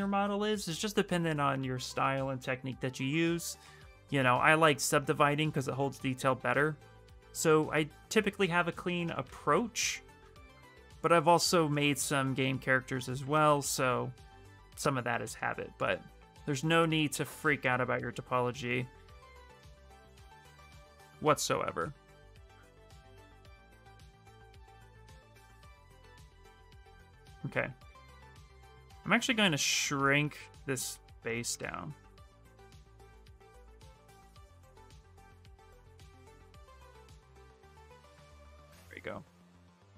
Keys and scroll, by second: 8.6 b, 9.0 v, 27.2 w.